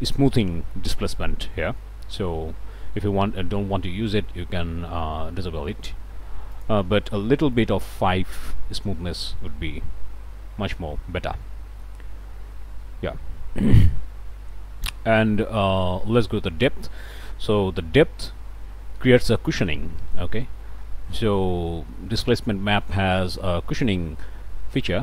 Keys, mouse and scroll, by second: 3.1 scroll up 1, 4.9 scroll down 1, 6.5 click, 8.0 KP_5, 10.0 scroll down 1, 10.5 scroll up 1, 12.2 middle click, 13.3 scroll up 1, 14.4 scroll up 1, 15.3 middle click, 17.4-25.0 drag.